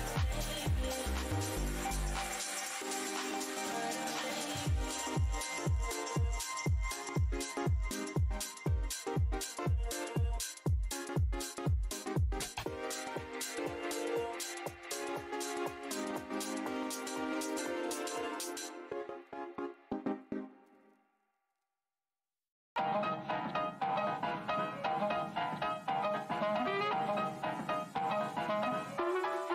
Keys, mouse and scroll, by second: 3.2 alt+click, 4.9 alt+click, 7.7 alt+click, 8.3 alt+scroll up 1, 9.3 click, 10.9 shift+right click, 12.6 right click, 13.4 click, 14.3 w, 15.1 shift+right click, 17.4 click, 18.2 scroll down 1, 18.2 w, 19.3 alt+click, 20.2 right click, 20.5 click, 20.8 scroll down 1, 20.8 w, 22.9 alt+click, 25.0 right click, 25.2 click, 25.4 alt+scroll down 1, 26.3 click, 29.1 w.